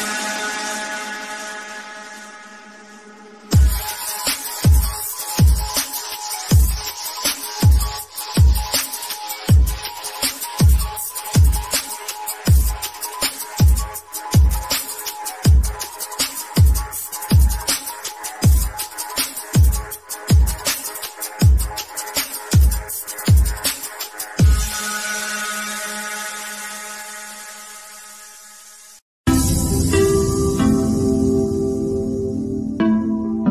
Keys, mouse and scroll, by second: 0.5-3.5 middle drag, 3.8 middle click, 4.5 scroll up 1, 7.7 click, 8.6 scroll up 1, 15.9 click, 16.5 scroll down 1, 16.9 middle click, 17.6 scroll down 1, 18.6-20.6 middle drag, 20.6 click, 29.6 middle click, 30.2-30.7 scroll up 1, 31.7-33.5 shift+middle drag.